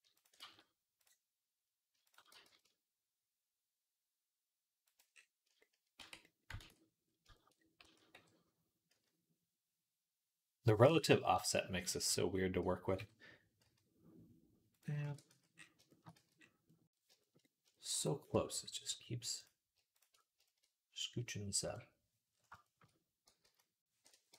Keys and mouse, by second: 0.3 ctrl+z, 2.1 g, 5.8 Tab, 6.5 ctrl+s, 7.7 s, 11.2 KP_1, 11.9 z, 12.5 s, 14.9 ctrl+a, 15.4-16.4 shift+right drag, 16.0 z, 16.6 right click, 16.8-18.0 shift+right drag, 18.1 Tab, 18.3-19.6 shift+right drag, 19.2 click, 19.6 shift+middle click, 19.9-24.3 shift+right drag, 21.5 KP_1, 23.3 z, 24.2 g.